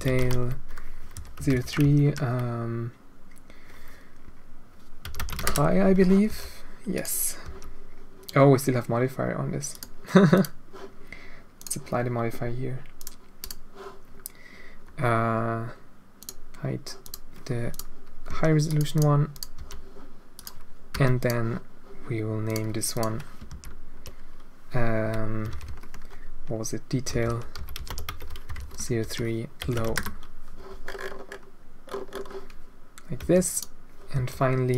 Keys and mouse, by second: 0.4 l, 1.8-5.9 shift+drag, 6.2 g, 7.4 g, 10.3 click, 11.5-13.4 drag, 16.2-17.1 drag, 17.6 click, 18.9 click, 18.9 g, 19.3 click, 19.5 g, 20.9 h, 21.1 click, 22.4 click, 22.9-25.4 drag, 25.4-30.5 right drag, 25.4 BackSpace, 25.6 BackSpace, 33.1 h, 33.5-34.1 right drag, 34.1 g.